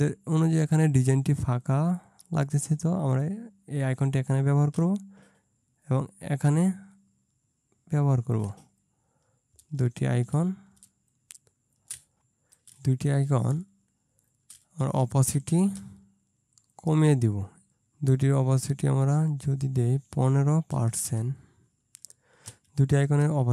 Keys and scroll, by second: 10.9 ctrl+space, 13.4 space, 21.0 BackSpace, 21.2 BackSpace, 22.6 Right, 23.1 BackSpace.